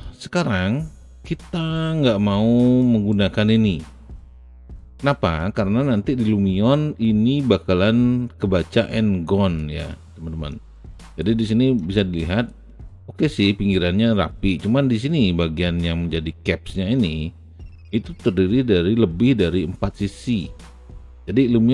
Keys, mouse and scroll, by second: 0.0-2.8 alt+drag, 3.1 alt+right click, 4.5 alt+right click, 5.4-6.5 alt+middle drag, 8.9 alt+click, 10.0 alt+middle click, 10.7 alt+right click, 11.5 alt+middle click, 11.9 alt+right click, 20.7 alt+right click, 21.2 alt+click, 21.6 alt+middle click.